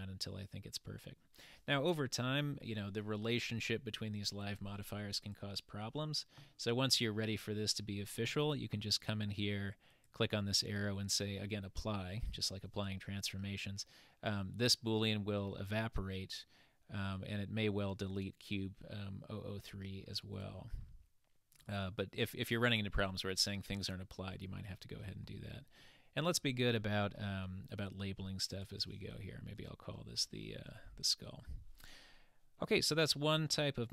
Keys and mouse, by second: 5.2 click, 9.9-13.6 drag, 21.6 click, 21.7-26.5 drag, 28.5 click, 28.8-31.5 drag, 33.0-33.9 middle drag.